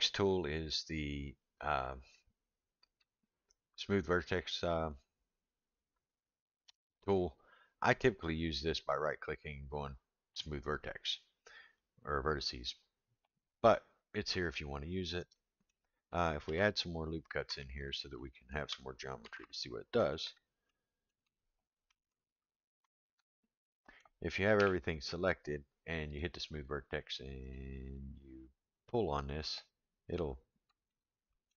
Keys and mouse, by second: 2.2-3.0 drag, 8.8-13.0 right drag, 15.3-15.7 middle drag, 16.4 ctrl+r, 18.1 middle click, 19.2 ctrl+r, 20.7 middle click, 23.6 middle click, 24.6 a, 26.1 click, 27.6-30.7 drag, 30.9-31.5 middle drag.